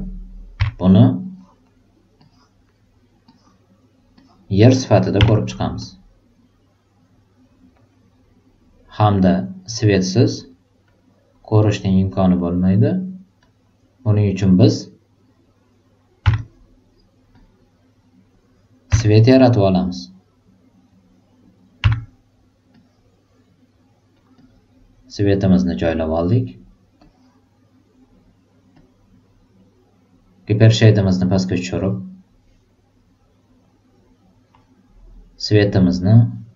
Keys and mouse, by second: 0.5 r, 1.2 click, 2.1 click, 3.3 click, 4.1 click, 5.7-7.2 drag, 10.3 click, 10.8 click, 11.6 click, 12.3 click, 13.3 click, 14.4 drag, 16.2 e, 17.3-18.1 drag, 18.8 r, 19.6-20.3 drag, 21.7 e, 22.7-23.4 drag, 24.1-25.9 drag, 26.9 click, 28.7-30.3 drag, 31.1 click, 33.6 click, 35.8 click.